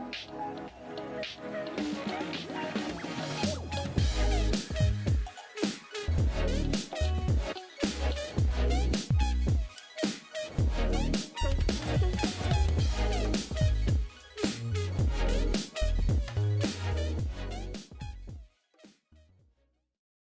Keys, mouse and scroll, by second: 0.1 click, 0.7 ctrl+u, 1.7 click, 2.0 click, 2.6 click, 3.5 click, 5.7-6.4 typing, 6.4 Return, 7.3 click, 7.8 click, 8.1 typing, 8.6 click, 9.3 click, 10.3 click, 10.8 click, 12.7 click, 13.9 click.